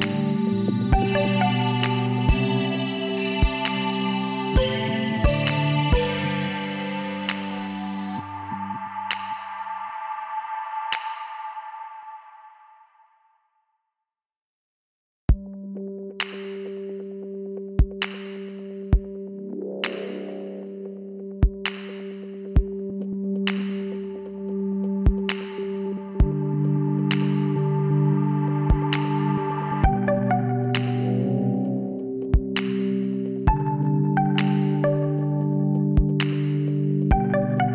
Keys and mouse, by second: 0.9-2.2 drag, 2.7 Tab, 4.3 Tab, 5.8 Tab, 6.9-8.8 drag, 8.2 Tab, 11.1 r, 15.2-17.0 drag, 18.3 r, 21.0 g, 24.4 KP_7, 30.0-31.8 drag, 31.0 l, 31.9-33.6 drag, 33.6 KP_1.